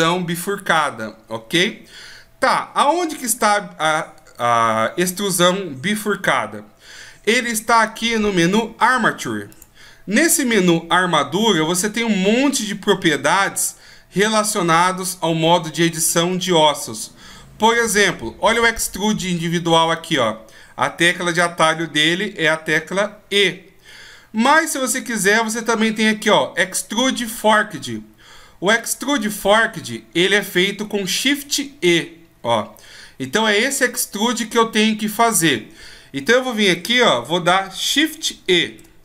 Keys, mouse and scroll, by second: 9.5 click, 11.0 click, 38.6 shift+e.